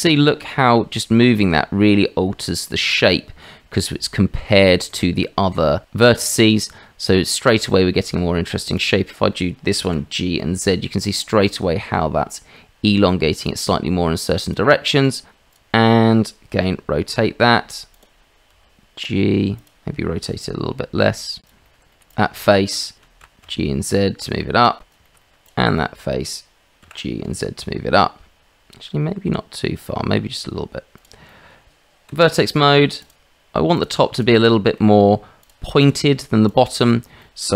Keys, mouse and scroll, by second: 0.9 shift+middle click, 1.4-3.4 middle drag, 4.9 middle click, 6.6 middle click, 7.7 shift+middle click, 8.6 click, 9.0 middle click, 9.8 g, 16.7 r, 18.5 g, 20.3 r, 21.6 shift+middle click, 21.9 middle click, 22.3 middle click, 23.2 g, 25.0 shift+middle click, 25.2 middle click, 25.4 click, 25.8 middle click, 26.9 g, 31.3 click, 31.7 Tab, 33.0 shift+right click, 34.4 shift+middle click, 35.4 shift+middle click, 37.2 shift+middle click.